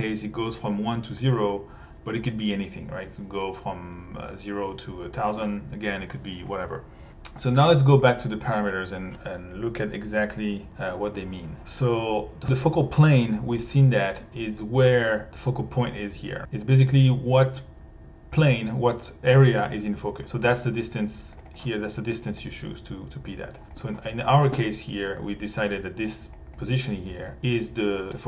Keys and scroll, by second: 23.8 1.